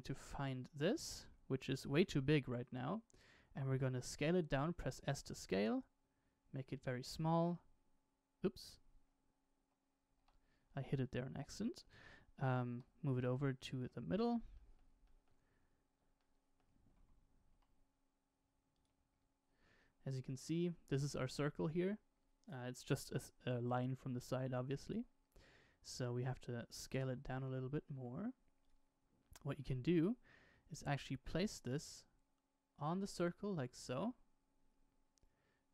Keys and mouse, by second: 0.0 KP_Decimal, 1.9-3.0 drag, 4.4 s, 7.4 h, 10.1 alt+h, 12.6 g, 14.5 shift+middle click, 15.0 shift+middle click, 16.1 shift+middle click, 17.5 g, 19.7-20.2 shift+middle drag, 25.8-27.1 drag, 27.1 s, 27.9 s, 29.5 g.